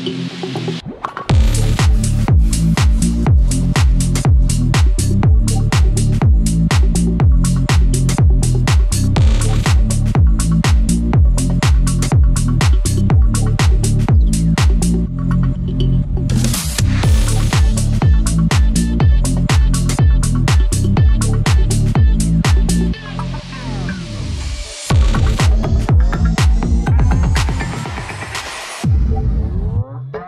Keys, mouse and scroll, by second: 0.7 scroll up 1, 1.1-3.1 drag, 3.1 scroll down 1, 3.7 scroll up 1, 4.2 click, 5.2-6.1 scroll down 1, 8.9 scroll up 1, 10.1 click, 12.3 click, 15.1-15.5 scroll up 1, 15.5 click, 16.6-18.2 drag, 18.2 scroll up 1, 18.7-19.1 scroll down 1, 20.2-21.7 drag, 21.7 scroll up 1, 22.6 click, 23.0-23.4 scroll down 1, 24.6 scroll down 1, 24.7 scroll up 1, 25.9 click, 29.2 click.